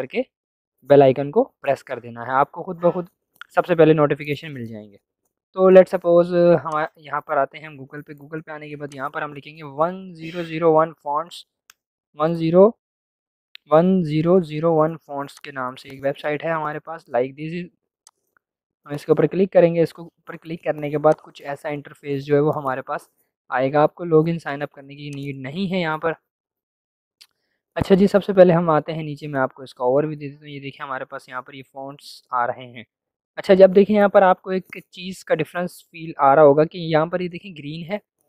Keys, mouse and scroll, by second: 6.6 click, 8.8 click, 9.6-10.3 typing, 11.5 Return, 15.2-18.0 drag, 21.1-35.0 drag.